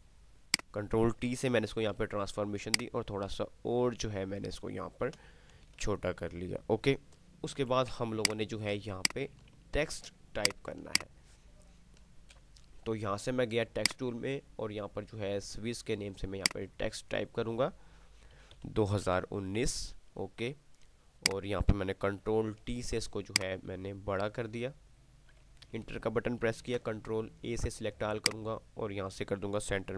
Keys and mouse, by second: 0.5 click, 2.0 ctrl+t, 2.8-5.5 shift+drag, 10.2 ctrl+click, 14.0 click, 16.7 click, 21.3 click, 22.5 ctrl+t, 23.5-25.2 alt+shift+drag, 27.0 ctrl+a, 28.5 click.